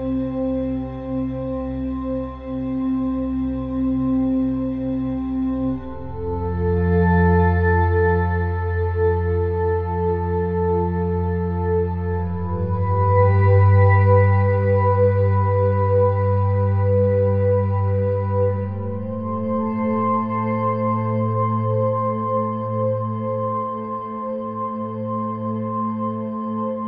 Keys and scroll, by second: 11.6 [, 11.9 ], 15.9 ], 16.5 [.